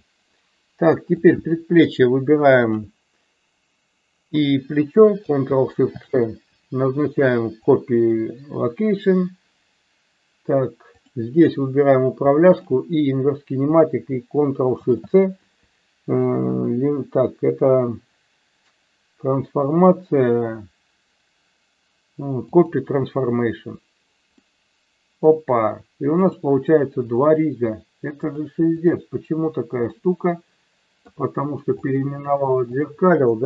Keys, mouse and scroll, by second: 1.2-2.1 drag, 2.5 shift+click, 5.8 ctrl+shift+c, 10.9 click, 12.6-13.3 shift+drag, 14.8 ctrl+shift+c, 24.4-25.2 middle drag, 26.2 click, 28.3 click, 29.9-31.1 middle drag, 31.8-32.9 drag, 33.3 middle click.